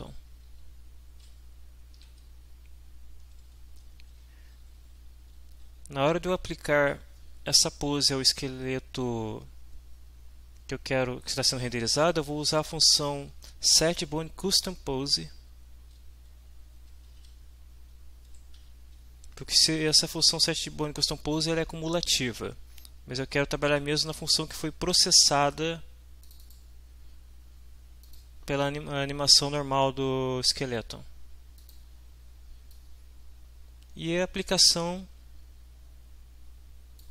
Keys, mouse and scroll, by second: 2.5 shift+Down, 4.9 Up, 5.8 Left, 13.0 Left, 14.9 Right, 16.3 Left, 17.1 End, 17.3 Left, 18.5 Home, 26.3 click, 28.1 click, 31.6 click, 32.7-37.1 drag.